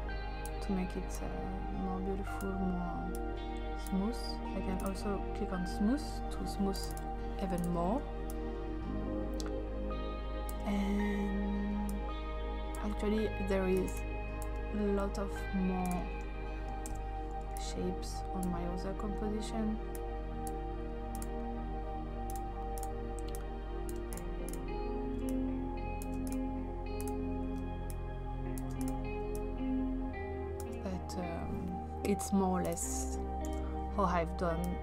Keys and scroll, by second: 16.9 ctrl+d, 33.5 ctrl+d.